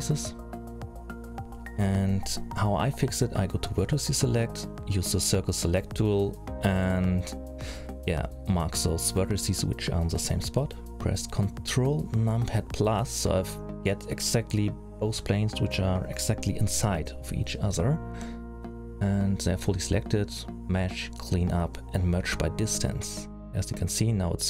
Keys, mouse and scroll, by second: 2.0 scroll up 2, 3.3 click, 4.0 c, 9.1 middle click, 10.8 middle click, 11.4-11.8 scroll down 4, 11.8-12.3 scroll up 3, 12.3 scroll down 1, 14.6-16.2 ctrl+KP_Add, 16.7-18.4 scroll up 3, 17.0 middle click, 18.4-18.8 scroll down 3, 19.9 click, 23.8 middle click.